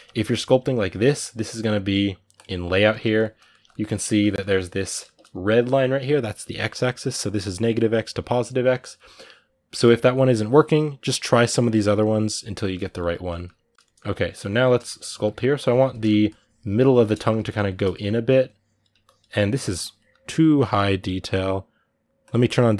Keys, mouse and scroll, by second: 2.2 click, 2.5-9.6 ctrl+middle drag, 9.6 click, 10.1-13.5 ctrl+middle drag, 13.5 click, 13.7 ctrl+middle click, 13.9 click, 14.2 ctrl+middle click, 14.6 shift+click, 14.9 ctrl+middle click, 15.2 click, 15.7 ctrl+middle click, 16.0-17.4 shift+drag, 17.4 shift+middle click, 18.1-22.7 drag.